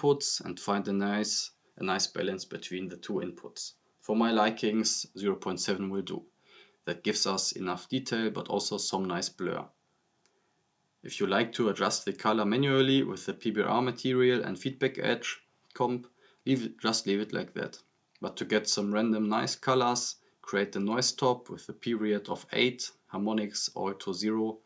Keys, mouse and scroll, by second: 4.1-5.0 drag, 5.8 scroll up 1, 6.7 scroll down 1, 8.7-9.3 drag, 10.9-11.3 scroll down 1, 11.3 click, 13.1-14.3 drag, 19.2-20.2 typing, 20.4 click, 22.1 click.